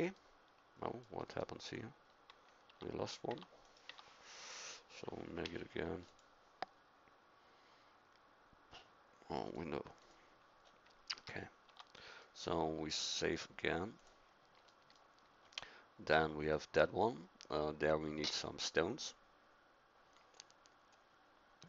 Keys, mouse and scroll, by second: 1.6 KP_1, 2.6 Tab, 3.3 Tab, 3.8 Tab, 5.4 u, 10.6 scroll up 1, 11.1 a, 11.7 Tab.